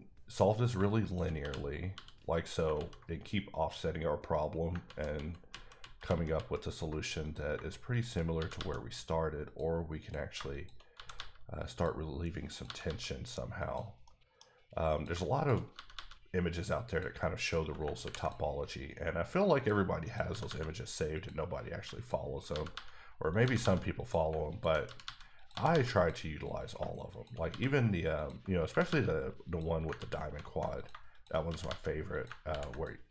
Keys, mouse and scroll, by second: 0.6 click, 1.0 shift+click, 1.4 f, 1.9 f, 2.7 ctrl+z, 5.4 ctrl+z, 5.8 ctrl+z, 6.3 ctrl+z, 7.2 click, 8.3 g, 8.5 g, 9.4 click, 10.0 click, 10.5 click, 10.9 g, 11.1 g, 11.7 click, 12.5 click, 12.6 g, 12.8 g, 13.5 click, 14.0 middle click, 14.9 click, 15.7 g, 15.9 g, 16.9 click, 17.2 middle click, 18.0 r, 18.2 click, 20.3 g, 20.4 g, 21.1 click, 22.5 g, 22.7 g, 23.3 click, 23.4 g, 23.6 g, 23.9 click, 24.8 g, 25.0 g, 25.3 click, 25.5 g, 25.7 g, 25.9 click, 26.6 click, 27.1 shift+click, 27.4 click, 27.5 f, 28.1 click, 28.6 g, 28.8 g, 29.4 click, 29.9 ctrl+z, 30.8 click, 31.5 g, 31.6 g, 32.1 click, 32.5 ctrl+r, 32.7 click.